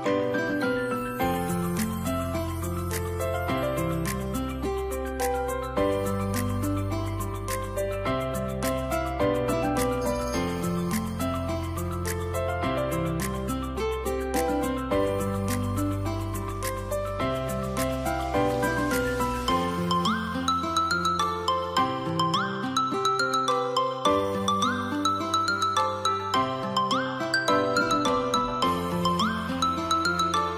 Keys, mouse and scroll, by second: 15.1 double click, 16.7 Tab, 20.0 Tab, 21.4 ctrl+KP_0.